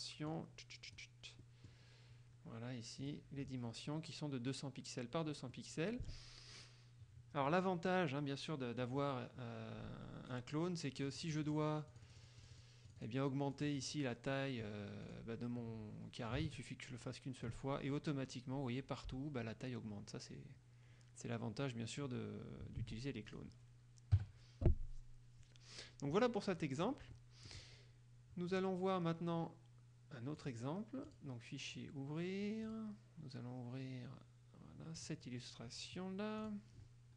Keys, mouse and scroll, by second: 0.4-1.3 drag, 1.6 middle click, 3.2 click, 5.7-11.2 middle drag, 11.2 click, 12.0 click, 13.6 click, 15.2 click, 16.5-17.8 ctrl+shift+drag, 23.0 ctrl+z, 23.4 ctrl+click, 24.3 KP_Subtract, 26.8 click, 27.8 middle click, 28.7 click, 29.0-30.6 middle drag, 30.6 click, 31.2 click, 32.8 click, 35.2 click, 36.6 click.